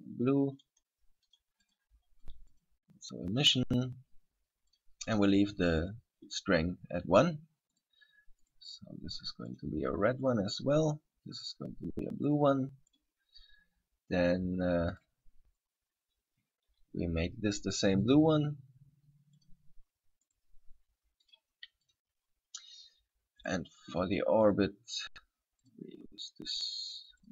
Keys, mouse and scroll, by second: 2.4 click, 2.7 click, 3.6 click, 7.9 right click, 8.6 right click, 9.7 click, 11.6 right click, 12.4 click, 15.1 right click, 18.3 click, 20.5 right click, 21.4 click, 23.6 right click, 24.6 click.